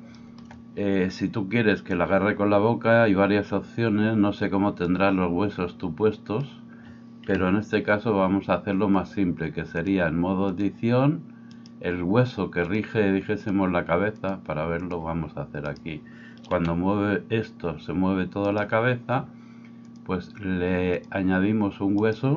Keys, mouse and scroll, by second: 7.2 KP_3, 9.8-22.3 drag, 11.5-12.8 middle drag, 11.5-12.8 right drag, 16.6 r, 22.1 middle click, 22.1 right click.